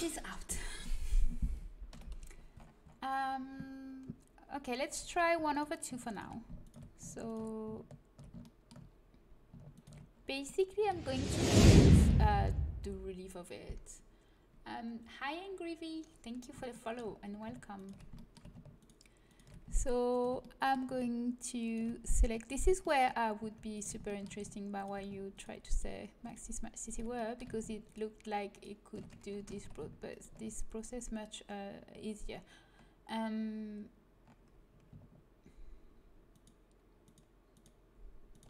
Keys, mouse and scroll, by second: 1.8 KP_1, 4.9 a, 5.4-8.0 drag, 8.4 click, 8.4 middle click, 9.6-11.9 drag, 9.6-11.9 middle drag, 17.7-20.5 middle drag, 17.7-20.4 right drag, 20.4 click, 22.3 middle click, 28.9 click, 29.0 right click, 29.5 ctrl+z, 36.2-38.4 right drag.